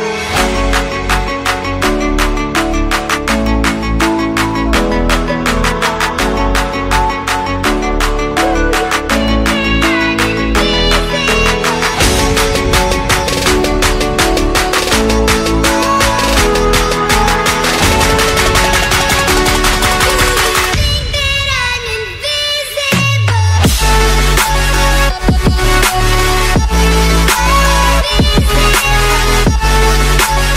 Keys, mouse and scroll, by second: 1.1 click, 2.0 click, 3.5 click, 3.8 click, 4.6 click, 5.9 click, 7.6 click, 7.7 click, 9.0 click, 12.2 click, 13.7 click, 14.7 click, 15.9 click, 17.7 click, 19.3 click, 20.0 click, 21.0 click, 21.2-22.2 typing, 23.5 click, 25.2 click, 25.8 click, 26.1-27.1 typing, 29.1 click.